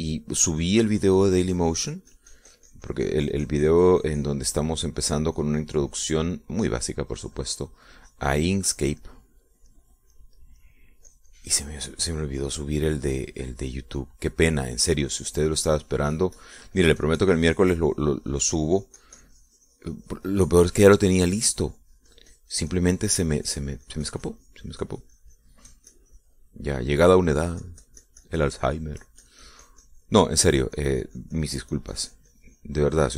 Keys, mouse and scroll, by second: 2.1-5.7 drag, 5.7 middle click, 6.6-10.2 drag, 7.5-12.2 middle drag, 12.3-15.6 drag, 15.7 middle click, 16.7-22.1 drag, 22.2-28.1 middle drag, 22.5-28.1 drag, 28.6-31.5 drag, 31.5 middle click, 32.0-33.1 drag.